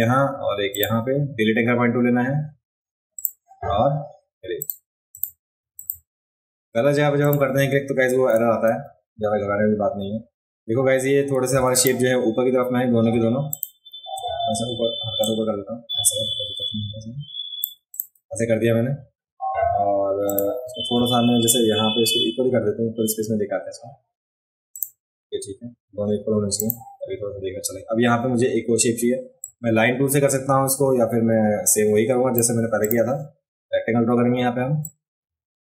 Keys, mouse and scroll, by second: 0.7 click, 3.1 click, 4.6 click, 5.1 click, 5.7 click, 7.2 click, 8.7 a, 11.5 v, 11.7 click, 13.5 shift+click, 15.2-17.6 drag, 20.3 click, 24.7 click, 26.6 click, 29.4-32.4 drag, 32.8 click, 34.8-35.6 drag.